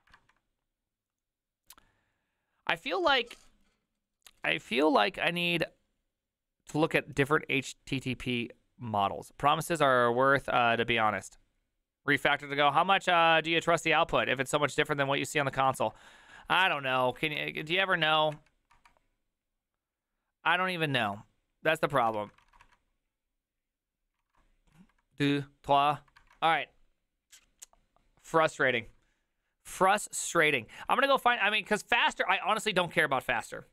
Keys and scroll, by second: 17.2 alt+{, 17.2 ctrl+a, 17.7 4, 18.1 ctrl+c, 18.2 ctrl+c, 18.4 Up, 18.8 Return, 20.7 ctrl+a, 21.0 2, 22.0 ctrl+a, 22.2 3, 22.5 ctrl+a, 22.7 2, 24.3 ctrl+a, 24.8 3.